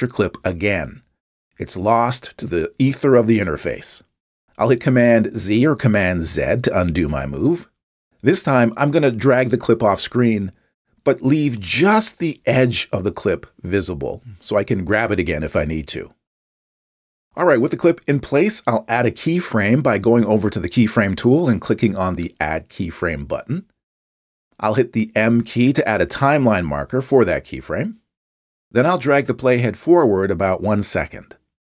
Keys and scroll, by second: 6.4 super+z, 26.6 m.